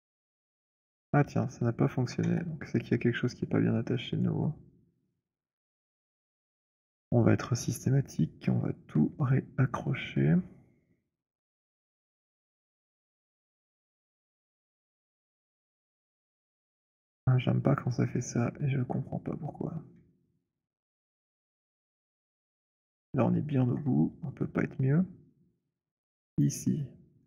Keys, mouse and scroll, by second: 2.0 alt+click, 2.2 z, 3.4 alt+middle click, 4.3 alt+right click, 5.1 click, 6.5 click, 8.2 right click, 9.7 click, 12.1 middle click, 13.0 c, 14.3-14.8 c, 15.1 c, 15.7 middle click, 15.7 c, 17.2 middle click, 17.6 middle click, 18.2 alt+middle click, 18.4 alt+middle click, 19.9-21.7 c, 22.2 middle click, 22.2 c, 22.5 middle click, 22.7 alt+middle click, 22.8 middle click, 23.3 alt+middle click, 23.5 middle click, 24.8 alt+middle click, 26.4 click.